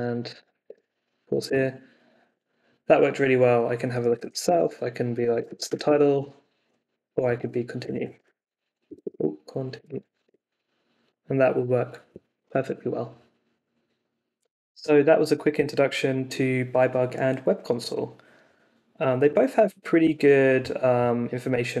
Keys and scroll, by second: 0.0-1.0 typing, 1.5 Return, 3.6-6.0 typing, 7.2-10.4 typing.